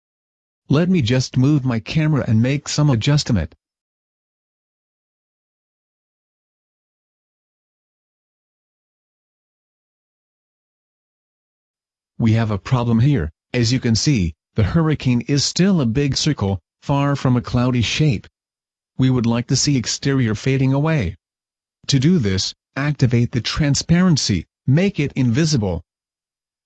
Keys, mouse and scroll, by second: 0.1 middle click, 0.4 click, 1.3 middle click, 2.1 KP_0, 2.2 KP_0, 2.7-3.6 scroll down 2, 3.6 middle click, 3.9 scroll down 2, 4.4 right click, 4.6 middle click, 7.0-7.9 scroll up 2, 7.4 right click, 8.1 g, 8.9 click, 9.1 s, 9.9 click, 10.1 g, 10.5 right click, 10.8 click, 11.3 click, 12.7 g, 13.0 click, 15.1 click, 22.0 click, 26.3 click.